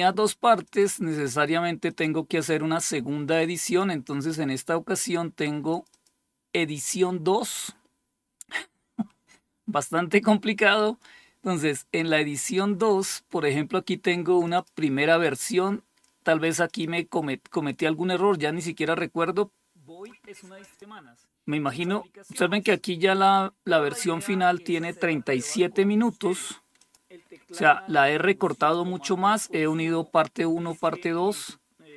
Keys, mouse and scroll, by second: 0.1 click, 1.3 click, 3.0 click, 5.1 click, 13.8 click, 14.0 click, 15.8 click, 16.1 click, 20.1 click, 21.1 click, 26.3 click, 27.0 click, 28.0 click, 30.8 click.